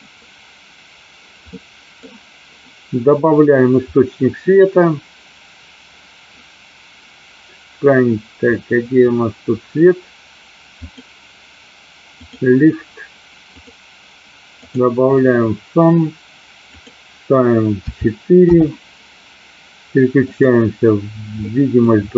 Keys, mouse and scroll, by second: 1.6 middle click, 10.9 click, 12.3 click, 13.5 click, 16.7-18.7 drag, 20.5 click, 21.5 middle click.